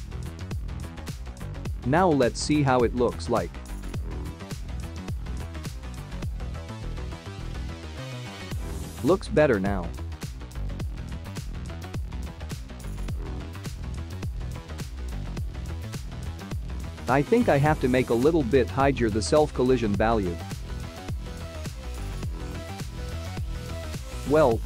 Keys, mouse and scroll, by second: 1.9 click, 3.8 click, 4.0 space, 22.1 space, 23.4 click, 24.0 click.